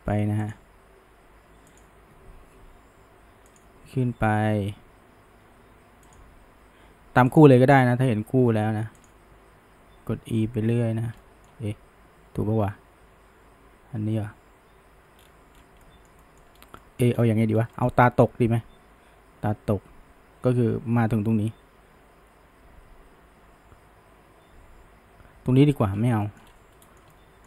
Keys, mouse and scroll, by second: 0.6 e, 7.6 shift+middle click, 8.1 e, 11.2-14.2 middle drag, 15.2 scroll, 15.8-16.6 middle drag, 16.6 scroll, 16.8 middle click, 17.2-17.5 scroll, 17.8-20.8 middle drag, 25.9 scroll, 26.2 shift+middle drag, 26.5-26.8 scroll, 26.8-27.4 shift+middle drag.